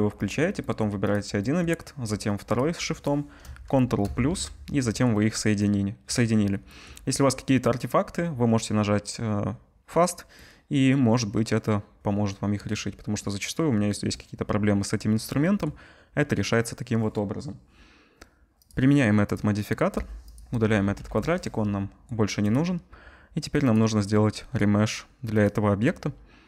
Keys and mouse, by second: 1.1-2.4 drag, 2.4 shift+middle click, 2.5-18.6 shift+drag, 4.0 ctrl+KP_Add, 18.6-20.3 middle drag, 20.3-23.7 drag, 21.0 Delete, 23.7-26.4 middle drag.